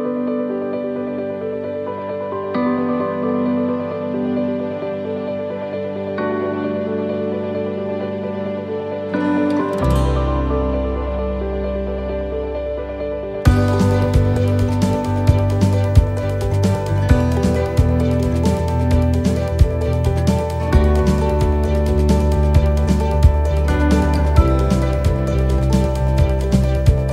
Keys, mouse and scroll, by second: 1.0 right click, 2.1 click, 5.5 x, 6.8-7.9 scroll up 6, 7.3 shift+middle click, 8.1 shift+middle click, 8.7-9.1 scroll up 2, 9.1 middle click, 11.7 shift+middle click, 12.4 scroll up 4, 12.8 middle click, 16.5-17.1 scroll down 6, 17.2 shift+middle click, 17.7 scroll down 2, 18.1 middle click, 18.8 middle click, 19.9 shift+middle click, 20.3 scroll up 3, 20.7 shift+middle click, 21.2 middle click, 22.5-22.8 scroll down 1, 22.8 middle click.